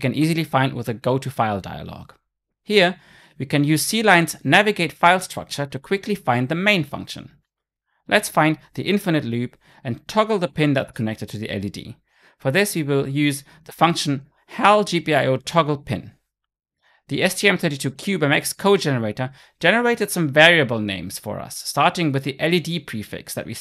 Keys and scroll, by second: 6.6 ctrl+F12, 8.9 Down, 18.7 Return.